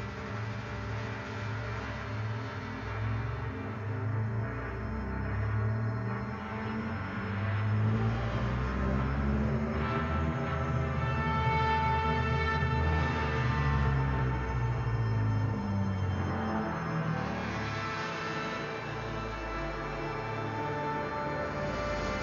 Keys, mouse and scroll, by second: 0.9 click, 7.6 click, 8.7 Left, 10.7 Return, 11.5 click, 11.8 space, 11.8 click, 12.0 space, 12.6-14.7 drag, 14.7 space, 14.8 click, 15.1 space, 16.1 click, 17.4 click, 19.0 Return, 19.5 click, 19.8 space, 19.9 click, 20.1 space, 20.4-22.2 drag.